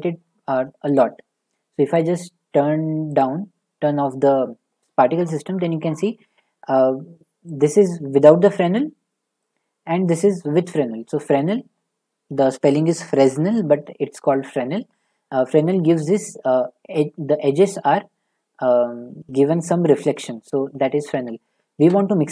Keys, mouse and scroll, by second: 0.9-10.7 drag, 20.1 middle click.